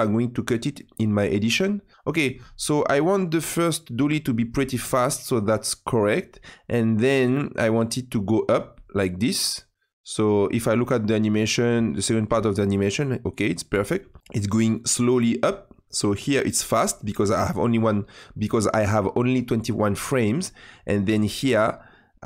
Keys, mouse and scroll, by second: 2.0-5.4 drag, 8.1-11.5 drag, 11.7 space, 13.8 space, 14.2-16.8 drag.